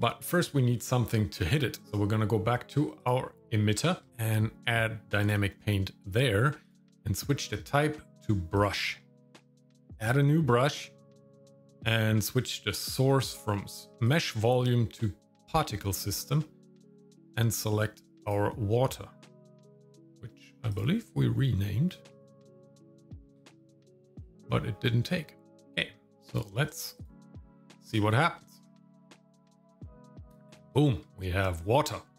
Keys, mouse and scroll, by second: 0.1 shift+middle click, 0.6 middle click, 1.8-2.7 scroll up 3, 3.0 click, 4.1 shift+middle click, 5.2 click, 6.6-8.7 drag, 9.9 click, 14.0-15.6 drag, 16.9-18.3 drag, 20.7 click, 22.1-24.2 drag, 27.0 click, 28.5 shift+middle click, 29.9 shift+middle click, 30.2 middle click, 30.7 shift+middle click.